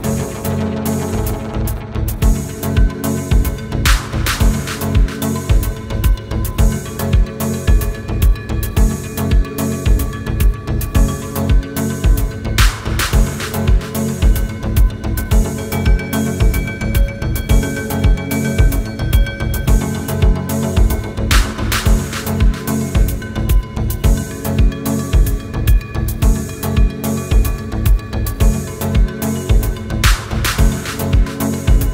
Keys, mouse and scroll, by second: 0.0 scroll down 1, 2.0 scroll down 1, 4.7 scroll down 1, 5.0 scroll up 1, 5.0 s, 5.6 scroll up 1, 7.0 scroll down 1, 7.6-8.1 scroll down 1, 8.3-8.6 scroll down 1, 10.5-10.9 scroll up 1, 11.9 scroll down 1, 13.0 scroll down 1, 13.2 scroll up 1, 13.4 scroll down 1, 13.6 scroll up 1, 14.2 scroll down 1, 14.3 scroll up 1, 14.8 middle click, 15.3 scroll down 1, 16.3 shift+click, 16.9 shift+click, 17.3 middle click, 17.8 typing, 21.0 scroll down 1, 21.3 middle click, 21.8 scroll down 1, 22.1 scroll up 1, 23.1 i, 24.1 scroll down 1, 24.6 scroll up 1, 26.8 scroll down 1, 27.3 double click, 28.6 scroll up 1, 30.1 typing.